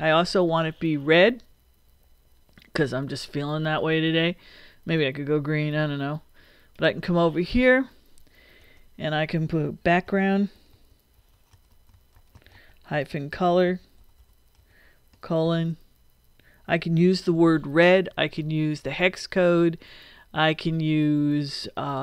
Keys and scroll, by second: 8.6 Return, 9.8-15.4 typing.